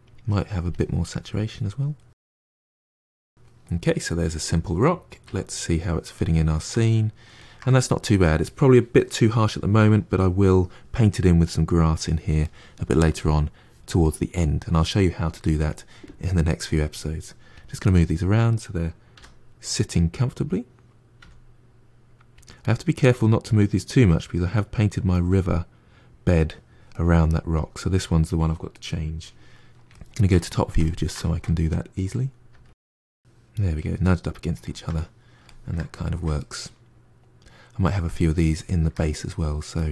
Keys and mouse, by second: 1.0 middle click, 1.3 click, 1.5 middle click, 1.7 click, 1.9 middle click, 2.1 click, 2.3-5.2 middle drag, 5.2 KP_Divide, 5.7-10.6 middle drag, 12.3-15.9 middle drag, 15.9-17.7 drag, 17.7-19.0 middle drag, 19.0 r, 22.5-27.4 middle drag, 27.4 click, 27.7-29.8 middle drag, 29.8 KP_7, 30.4-31.7 ctrl+shift+middle drag, 31.7 g, 32.7-39.9 middle drag.